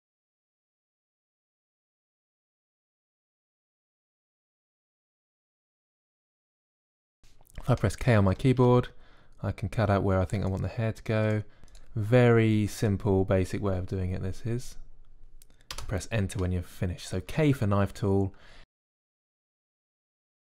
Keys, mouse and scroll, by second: 3.2 a, 3.6 b, 3.8 c, 4.0 click, 5.4 click, 6.2 click, 6.8 click, 7.2 click, 7.4 a, 8.0 click, 8.1 Tab, 8.5 Tab, 10.0 k, 13.2 c, 14.0 k, 14.7-17.1 drag, 17.2 Tab, 17.9 Tab, 18.4 click, 18.5 Tab, 18.9 click, 19.0 middle click.